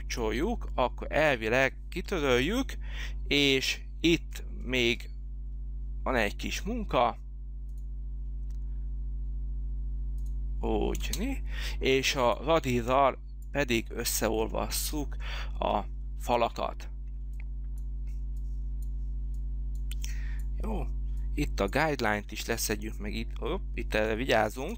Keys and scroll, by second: 0.0 space, 2.5 Delete, 11.0 space.